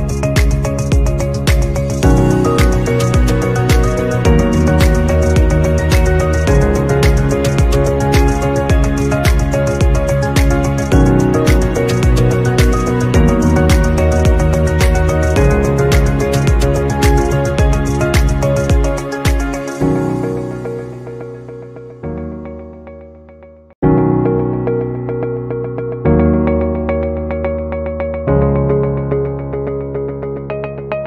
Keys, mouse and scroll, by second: 0.5 shift+click, 1.3 right click, 8.4 double click, 12.3 right click, 13.5 right click, 19.2 double click, 22.5 double click, 26.6 double click.